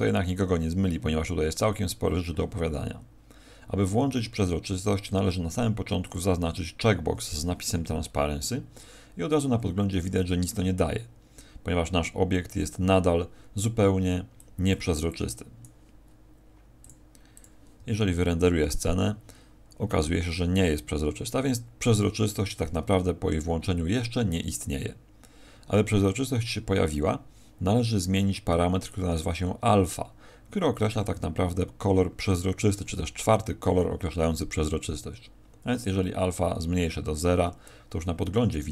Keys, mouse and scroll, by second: 6.0 click, 14.3 click, 15.1 click, 16.8 click, 17.3 click.